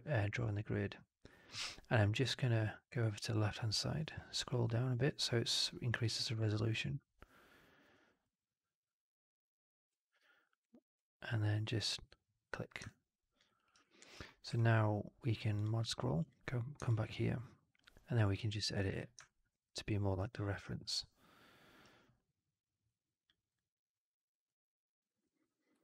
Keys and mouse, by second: 8.2-11.8 ctrl+drag, 12.8-13.3 alt+drag, 13.4 alt+right drag, 13.5 alt+right click, 13.7 alt+drag, 14.0 alt+middle click, 14.4 q, 16.8-18.7 alt+drag, 18.8 w, 19.2 alt+click, 19.6 alt+middle drag, 21.3 w, 22.8 click.